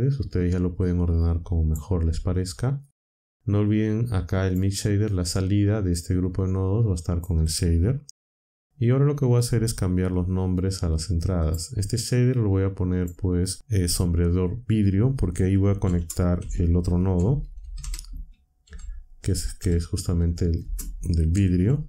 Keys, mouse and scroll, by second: 0.8-1.8 drag, 3.6 click, 6.1 click, 9.4 n, 11.4 click, 12.9 click, 15.8-21.8 typing.